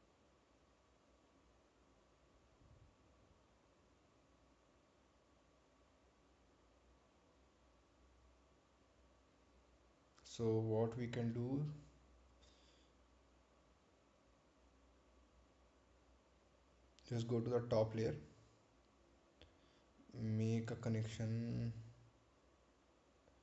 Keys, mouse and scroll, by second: 0.0-0.5 scroll up 1, 13.6 click, 17.4 click.